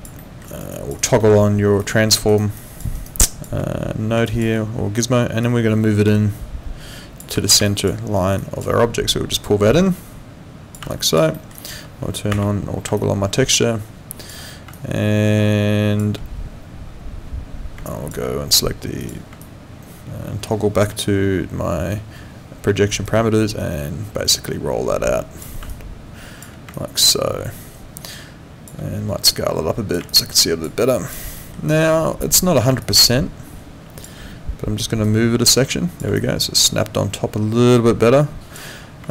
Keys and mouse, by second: 0.2 alt+middle click, 0.5 alt+right click, 0.7 alt+click, 1.0 alt+right click, 1.8 click, 2.3 alt+right click, 2.6 alt+click, 3.0 alt+right click, 3.2 alt+click, 4.3 alt+click, 5.4 click, 7.3 ctrl+z, 7.7 alt+click, 8.2 alt+right click, 8.4 alt+click, 10.9 click, 11.3 middle click, 11.5 right click, 12.3 shift+6, 13.0 click, 14.7 click, 17.9 click, 19.0 click, 19.4 click, 23.1 click, 25.7 alt+click, 26.7 alt+click, 29.3 click, 30.1 alt+click, 31.3 alt+middle click, 31.7 alt+click, 32.8 alt+click, 34.0 click, 35.0 click, 36.2 alt+click.